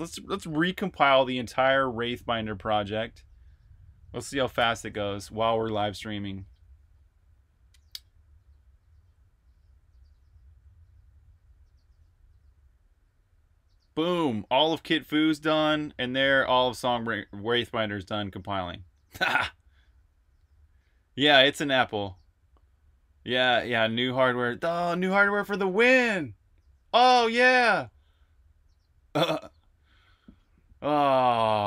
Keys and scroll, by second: 4.6 alt+super+b, 4.8-5.7 typing.